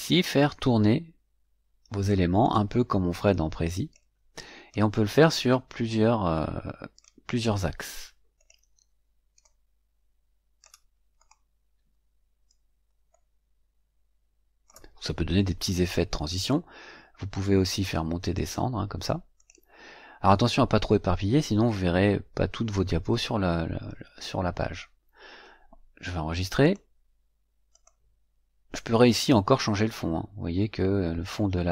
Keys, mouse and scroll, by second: 0.3-2.2 drag, 2.3 click, 3.2-4.1 drag, 4.6-7.1 drag, 8.3 click, 9.4-10.8 drag, 11.1 click, 13.0-14.8 drag, 16.4-17.5 drag, 17.8 click, 19.3 click, 26.5 click, 27.6 click, 29.0 click.